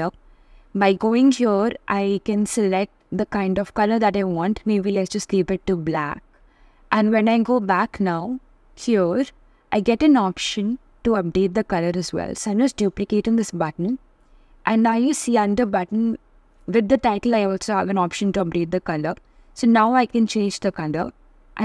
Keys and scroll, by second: 10.5 super+d.